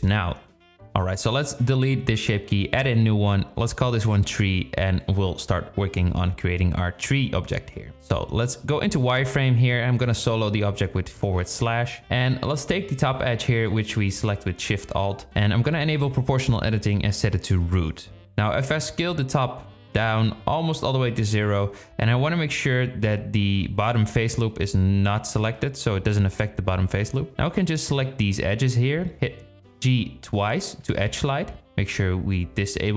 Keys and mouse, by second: 2.8 click, 3.0-4.9 drag, 4.2 e, 5.0 Tab, 5.0 KP_1, 8.1 z, 11.8 shift+drag, 13.7 alt+shift+click, 16.0 click, 18.3-19.5 drag, 20.0 s, 28.2 click, 30.4 g.